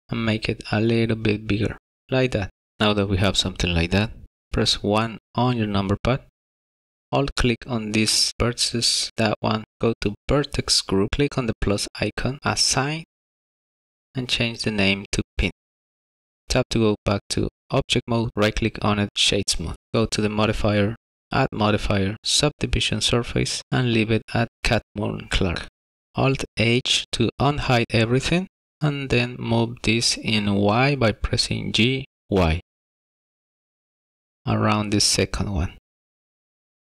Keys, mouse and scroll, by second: 6.4 alt+1, 6.5 alt+click, 10.1 click, 11.6 click, 13.4 click, 14.4 click, 14.5 click, 16.5 Tab, 17.9 right click, 20.0 click, 20.8 click, 23.6 click, 26.8 alt+h, 27.9 click, 28.5 middle click, 31.5 g, 32.0 y, 33.7 g.